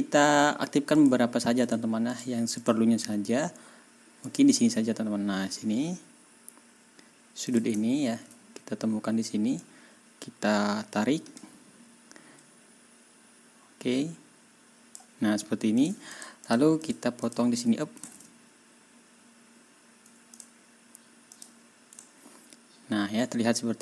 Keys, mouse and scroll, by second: 1.0 click, 1.6 click, 2.6 click, 4.2 click, 7.5 click, 7.8 ctrl+scroll down 2, 9.6-15.1 drag, 15.8 click, 16.1 click, 16.4 click, 16.5-17.1 scroll up 2, 17.2 click, 18.1 ctrl+y, 20.3 middle click, 21.3 middle click, 22.0-22.6 ctrl+scroll up 4, 23.2-23.8 ctrl+scroll down 4.